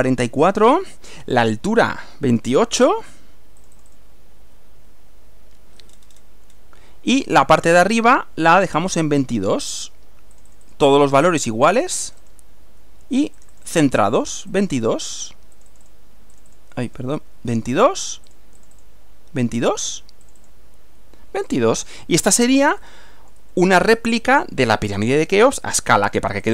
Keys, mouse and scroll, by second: 3.6 click, 4.6 2, 4.8 8, 5.9-6.4 scroll down 1, 10.4 click, 12.0 click, 12.6 2, 13.4 click, 14.1 2, 14.6 click, 15.7 click, 16.4 click, 16.9 click, 17.2 2, 18.3 click, 19.2 2, 20.0 click, 20.6 click, 20.8 2, 21.5 click, 22.0-25.2 middle drag, 26.4 click.